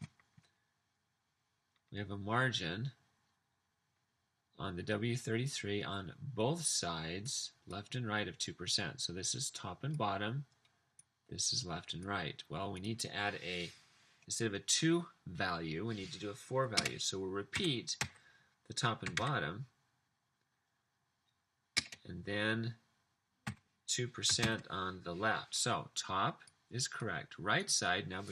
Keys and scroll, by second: 16.9-19.5 typing, 21.9 space, 23.5-24.5 typing.